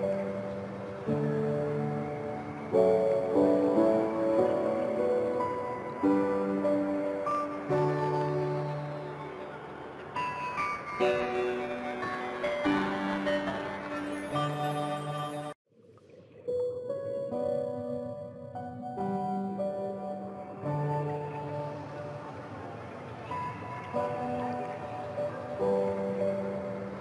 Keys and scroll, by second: 23.5 Return.